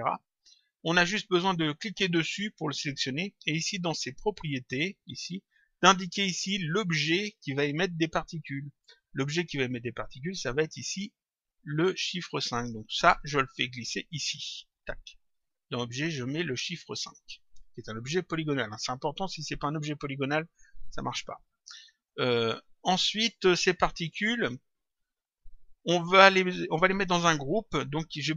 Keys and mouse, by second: 1.7 click, 3.5 click, 13.1 click, 22.5 click.